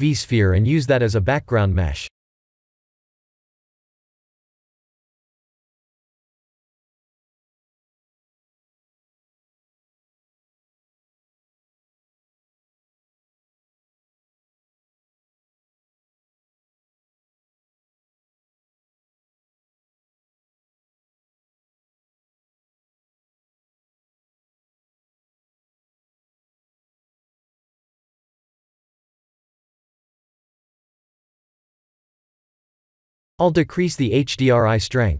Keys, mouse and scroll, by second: 1.9 s, 2.8 click, 3.7 ctrl+3, 4.3 right click, 6.7 click, 7.6 click, 10.1-11.6 drag, 11.9-13.0 scroll down 3, 13.0-15.4 drag, 16.0 KP_0, 18.4 click, 23.5-27.0 drag, 27.6-28.7 drag, 29.2-32.9 drag, 34.0 click.